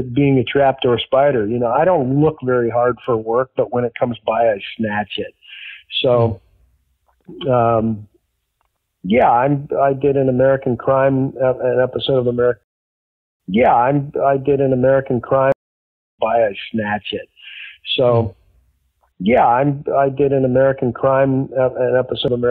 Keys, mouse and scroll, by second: 11.3-12.5 drag, 13.1 ctrl+shift+Delete, 13.3 space, 14.2 click, 14.8 click, 15.4 space, 16.0 click, 16.1 space, 16.8 click, 17.3 click, 18.5 click, 19.7 click, 20.4 click, 21.3 click, 22.3 click.